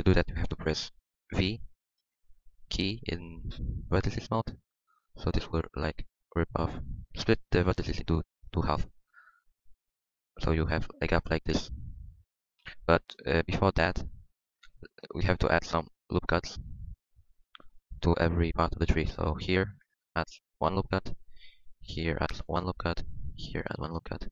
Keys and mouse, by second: 4.4 v, 7.3 middle click, 7.9 middle click, 8.5 middle click, 13.2 ctrl+z, 14.4 ctrl+z, 14.4 ctrl+z, 18.8 ctrl+r, 20.4 middle click, 21.9 ctrl+r, 23.3 ctrl+r, 23.3-24.3 middle drag.